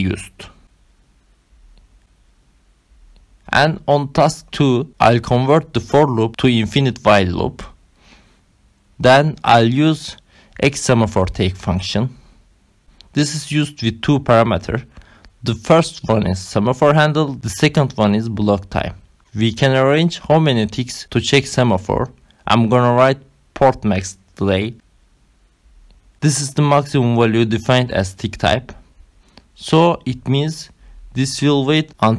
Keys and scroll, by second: 0.5 Return, 1.1 Right, 1.7 shift+,, 4.2-6.0 typing, 6.3 Right, 7.2 ctrl+alt+7, 7.7 Right, 8.0 BackSpace, 8.5 Down, 10.2 BackSpace, 11.2 x, 13.1-20.0 typing, 21.1-24.5 typing, 26.8 Right, 28.5 shift+9, 30.2 ctrl+alt+7, 31.6 Return.